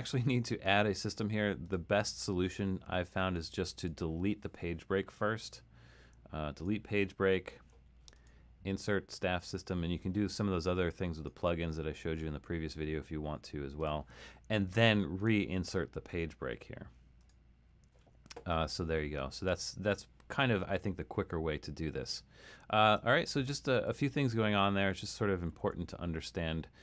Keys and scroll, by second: 23.2 super+z, 23.7 super+z, 25.6 super+z.